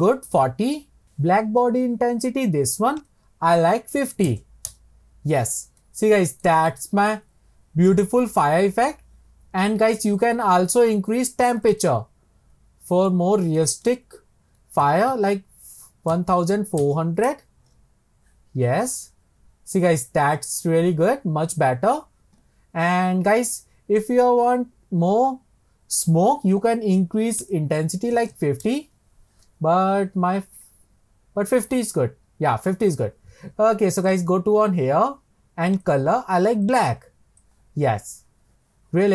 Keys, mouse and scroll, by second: 1.0-1.6 drag, 3.0-5.9 drag, 5.9 middle click, 6.4 scroll down 1, 11.7-16.6 drag, 27.6-31.0 drag, 34.9 click, 35.9 click.